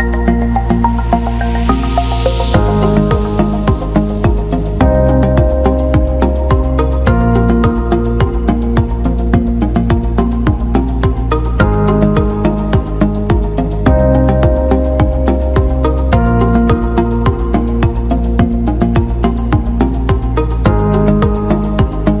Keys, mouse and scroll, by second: 0.0 click, 1.6 click, 4.9 click, 21.4-22.2 drag.